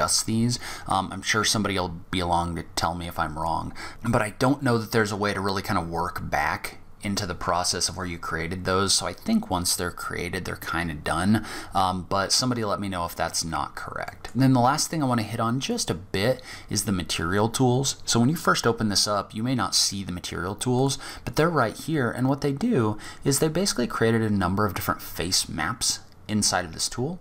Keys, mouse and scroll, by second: 2.4-3.9 scroll down 1, 12.5-13.2 scroll down 2, 13.2 middle click, 14.8 click, 19.9 click, 21.8-22.9 scroll up 5, 23.1-24.2 scroll up 2, 24.2-24.7 scroll up 1, 24.7-25.4 scroll down 1, 25.6-26.7 scroll up 2, 26.7-27.2 scroll up 2.